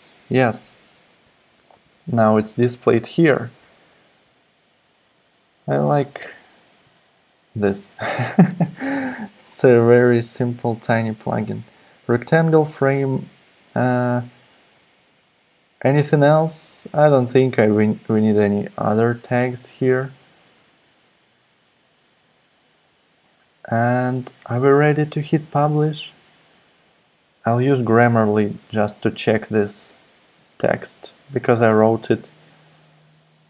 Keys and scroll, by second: 0.1 Right, 28.1 super+c, 30.6 super+c, 31.0 super+Tab.